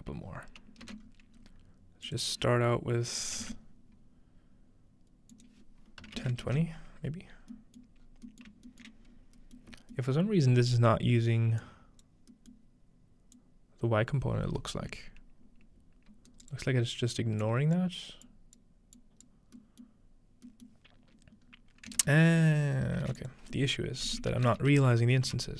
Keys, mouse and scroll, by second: 0.3 scroll down 1, 0.8 ctrl+space, 1.0-1.5 scroll up 2, 2.1-4.0 drag, 2.1-2.8 scroll up 1, 5.3-6.7 drag, 6.4 ctrl+space, 8.4 Tab, 8.4-9.1 scroll down 2, 9.1-11.5 scroll up 3, 9.6-11.1 shift+middle drag, 11.6 click, 13.4-16.6 drag, 16.3 middle click, 16.3 right click, 16.6 right click, 16.6 scroll down 2, 17.4 click, 18.3 click, 19.0 click, 19.9-21.7 middle drag, 21.5-22.7 scroll up 1, 22.0 ctrl+space, 23.1-25.0 typing, 23.2-25.2 shift+drag, 25.3 Return.